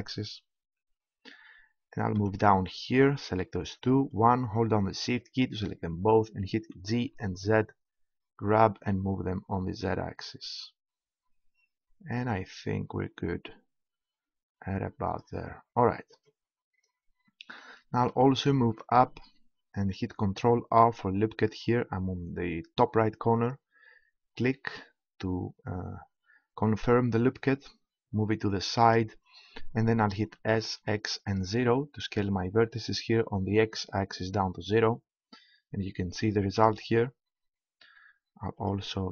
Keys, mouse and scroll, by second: 0.1-1.8 drag, 1.8-4.0 middle drag, 4.0-5.2 right drag, 6.7 g, 15.2-16.8 drag, 20.8 ctrl+r, 28.9-30.7 drag, 30.3 s, 35.4-38.6 middle drag, 38.6-39.1 right drag.